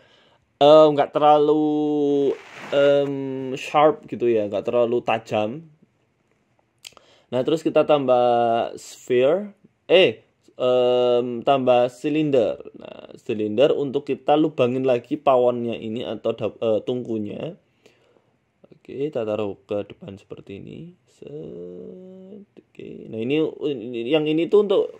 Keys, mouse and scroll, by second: 0.5 scroll up 3, 0.7 shift+middle click, 1.0 middle click, 1.5 KP_1, 1.8 Tab, 2.0 shift+middle click, 3.2 click, 3.8 click, 4.7 g, 5.6 Tab, 5.7 scroll down 1, 5.8 middle click, 6.4 shift+middle click, 6.6 shift+a, 8.1-8.5 scroll down 3, 8.4 s, 9.2 ctrl+z, 9.4 right click, 9.9 right click, 10.1 shift+s, 11.5 shift+a, 12.3 shift+a, 13.6 s, 15.6 g, 17.7 middle click, 18.1 Tab, 18.6 Tab, 18.9 g, 19.9 middle click, 20.4 scroll up 2, 20.6 middle click, 21.0 middle click, 21.4 s, 22.2 middle click, 23.0 g, 23.7 middle click, 24.2 shift+middle click.